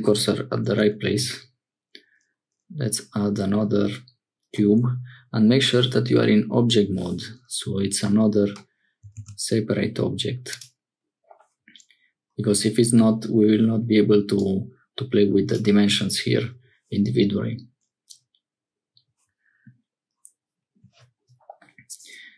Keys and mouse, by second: 1.0 shift+a, 9.1 shift+a, 14.4-15.6 drag.